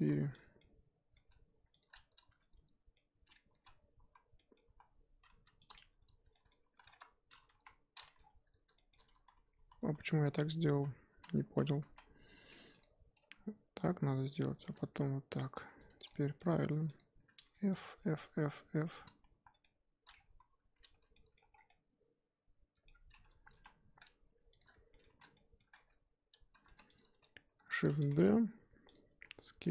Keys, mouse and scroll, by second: 0.1 2, 0.4 click, 0.6-1.8 middle drag, 1.8 shift+click, 2.3 f, 2.9-3.6 middle drag, 3.6 z, 4.1 z, 4.4-4.7 middle drag, 4.7 z, 5.7 click, 6.3-6.7 middle drag, 6.7 z, 6.9 1, 7.3 scroll up 2, 7.5 KP_1, 8.2-8.7 scroll down 3, 8.7 shift+middle drag, 9.0 scroll up 1, 9.1 ctrl+z, 9.3 ctrl+z, 9.5 ctrl+z, 9.8 ctrl+z, 10.2 ctrl+z, 10.7 ctrl+z, 11.1 ctrl+z, 11.4 ctrl+z, 11.8 ctrl+z, 12.8 click, 13.2 e, 14.6 e, 15.5 2, 15.9 click, 16.0 scroll down 1, 16.1 middle click, 17.0 shift+click, 17.4-19.4 typing, 17.7 click, 19.6-20.3 middle drag, 20.3 ctrl+z, 20.9 f, 21.1-21.5 middle drag, 21.5 scroll down 5, 21.7-22.9 middle drag, 22.9-23.5 scroll up 3, 23.5 KP_1, 23.6-24.2 scroll up 1, 24.2 Tab, 24.6 click, 24.9 shift+middle drag, 25.0 z, 25.3-26.3 shift+middle drag, 26.3 Tab, 26.6 3, 26.9 click, 27.6 shift+d, 28.0 g, 29.1 s.